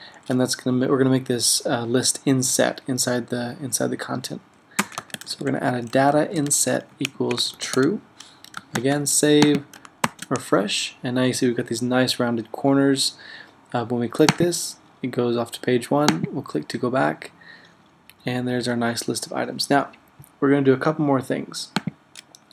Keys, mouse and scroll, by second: 4.8-8.3 typing, 8.8 super+s, 10.1 super+r.